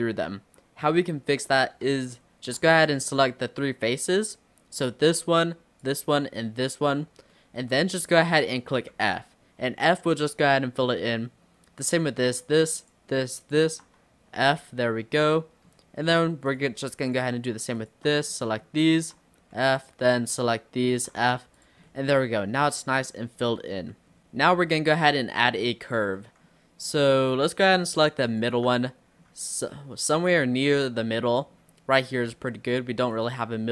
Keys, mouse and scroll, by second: 1.0-4.8 middle drag, 4.8 click, 5.8 shift+click, 6.6 shift+click, 7.4-9.0 middle drag, 9.0 f, 10.5-11.9 middle drag, 11.9 click, 12.8 shift+click, 13.5 shift+click, 14.4 f, 14.9-16.5 middle drag, 16.5 click, 17.1 shift+click, 17.8 shift+click, 18.3-19.5 middle drag, 19.5 f, 19.8 click, 20.3 shift+click, 20.9 shift+click, 21.2 f, 21.6 click, 21.9-23.1 middle drag, 23.1-23.7 scroll down 7, 23.7 middle click, 24.2 scroll up 1, 24.2-26.0 middle drag, 26.0 scroll up 2, 26.2 middle click, 26.8-28.3 scroll up 1, 28.3 alt+click, 28.9 middle click, 29.3-29.8 scroll down 1, 29.8-30.9 scroll down 1, 30.9-33.2 middle drag, 33.2 click.